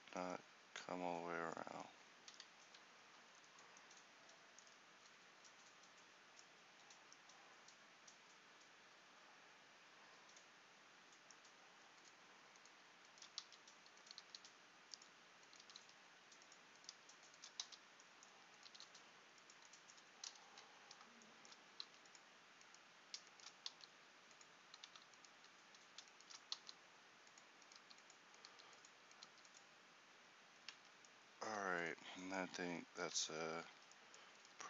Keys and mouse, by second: 1.1 middle click, 1.5 middle click, 13.5 f, 14.3 g, 15.7 g, 17.8 f, 18.7 g, 19.9 right click, 21.9 g, 23.9 g, 24.9 z, 25.5 z, 26.6 g, 28.6 g, 30.6 click, 30.8 Tab, 33.8 Tab.